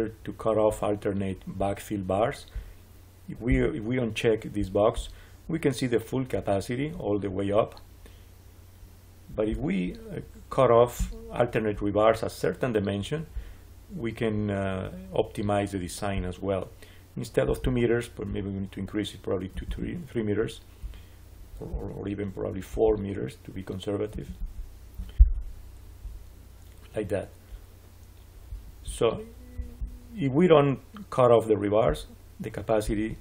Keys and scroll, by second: 19.4 3, 19.5 Return, 24.0 4, 24.3 Return.